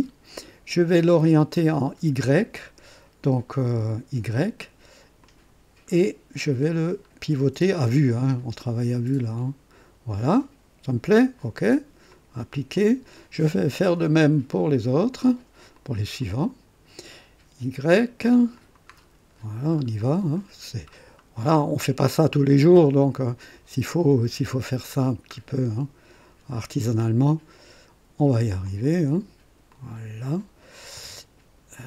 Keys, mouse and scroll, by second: 3.6-5.2 scroll up 1, 5.2 click, 6.0-6.4 scroll up 2, 6.6-7.3 scroll down 2, 7.7 scroll down 2, 8.6 scroll down 1, 12.1 click, 12.8 click, 13.9 click, 15.7 click, 16.2 click, 17.4 scroll up 1, 18.5 click, 19.3-20.0 scroll down 2, 20.4-21.2 scroll down 2, 22.2 scroll down 1, 22.7-23.2 scroll down 2, 24.1 scroll down 1, 26.6 click, 27.3 right click, 28.7 click, 29.7 click.